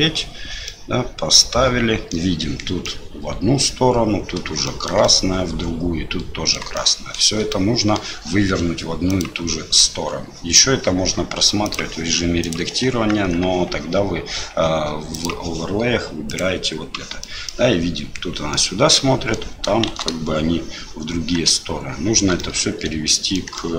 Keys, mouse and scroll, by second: 0.6-2.1 middle drag, 2.8 middle click, 4.6 shift+middle click, 5.0-6.5 middle drag, 6.7 shift+middle click, 7.5 middle click, 9.1-11.3 drag, 11.6-12.8 drag, 13.1 Tab, 15.2-17.0 drag, 17.2 middle click, 18.5 middle click, 19.9 shift+z, 22.4 middle click, 23.5 shift+middle click.